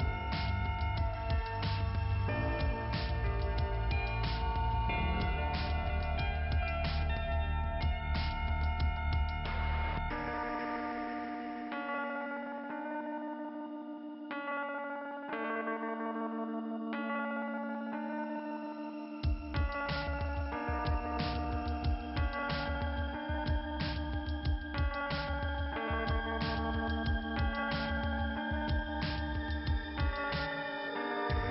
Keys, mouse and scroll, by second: 2.2 click, 2.9 click, 3.7-4.1 scroll down 3, 3.9 click, 4.8 click, 7.5 click, 7.7 click, 9.6-10.0 scroll up 2, 13.7 click, 13.9 click, 16.2 click, 18.2 click, 19.2 click, 19.4 click, 24.7 scroll down 2, 29.7 click, 30.4 click, 31.1 click.